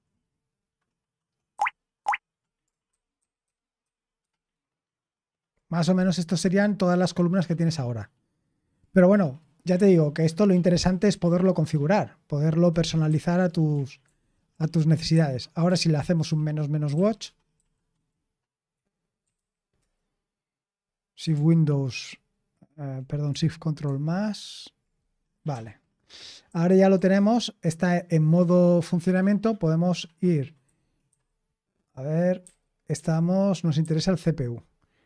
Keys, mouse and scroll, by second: 1.5 shift+super+-, 1.9 super+_, 2.8 ctrl+_, 3.8 ctrl+_, 13.0 q, 14.0 ctrl+p, 14.5 ctrl+p, 15.1 ctrl+n, 15.6-17.5 typing, 18.9-19.8 typing, 23.8 ctrl+*, 25.5-26.9 typing, 30.6-31.0 typing, 32.4-33.7 typing.